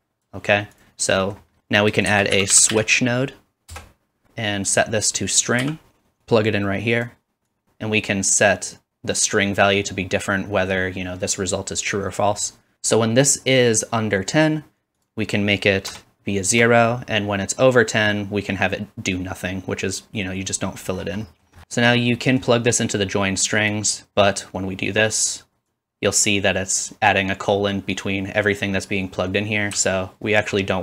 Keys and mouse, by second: 0.0 click, 0.9-2.1 middle drag, 2.1 shift+a, 2.9 s, 4.7-30.8 drag, 29.9-30.8 ctrl+right drag, 30.5-30.8 middle drag.